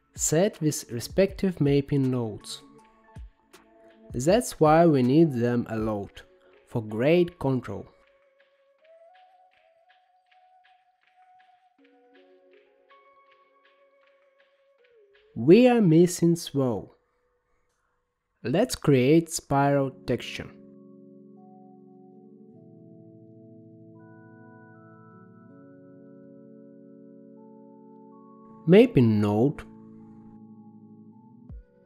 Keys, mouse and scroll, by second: 4.7-6.2 drag, 6.2-7.6 middle drag, 7.7-10.3 middle drag, 10.3-16.4 drag, 16.5-19.5 middle drag, 19.6-22.2 scroll down 17, 22.2-23.2 middle drag, 23.2-24.6 drag, 24.6 g, 26.4 middle click, 27.2-28.0 scroll up 12, 28.0 middle click, 28.7-29.3 scroll up 4, 29.4 shift+d.